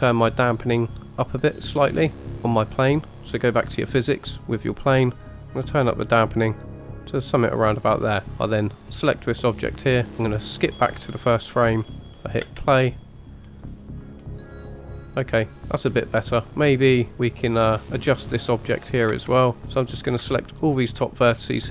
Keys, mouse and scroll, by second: 0.1 click, 2.2 click, 5.5-7.3 drag, 8.9 click, 10.6 click, 11.8-12.5 scroll up 1, 12.5-13.5 scroll up 1, 12.5 space, 13.5-14.3 scroll down 1, 14.3 scroll down 1, 16.5 space, 17.1 shift+middle drag, 17.1 scroll up 1, 17.8 middle click, 19.1 Tab, 19.6 middle click, 19.6 scroll up 2, 19.8 click, 20.4 alt+shift+click, 21.3-21.7 scroll up 1.